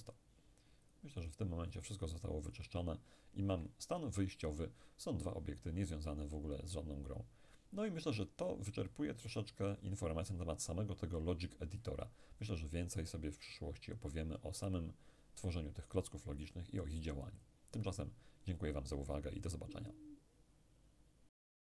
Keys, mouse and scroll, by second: 0.9-3.6 drag, 3.9-5.4 scroll down 1, 12.4-13.4 scroll down 1.